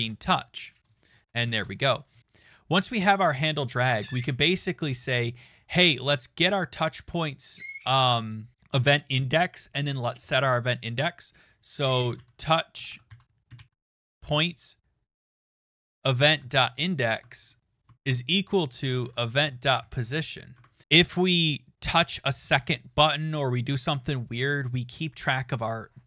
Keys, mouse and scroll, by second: 0.0 Return, 0.9 click, 1.4 Return, 1.9-2.7 typing, 11.5-14.4 typing, 16.1-20.5 typing, 17.3 Right.